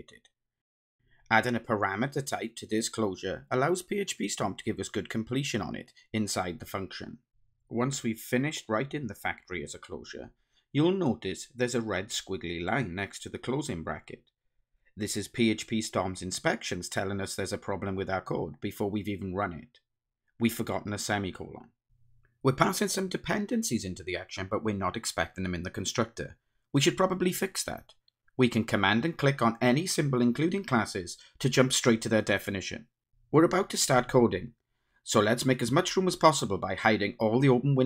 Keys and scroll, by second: 3.8 Return, 8.6 Return, 9.9 Return, 11.7 Return, 29.3 super+b, 35.1 ctrl+shift+super+F12.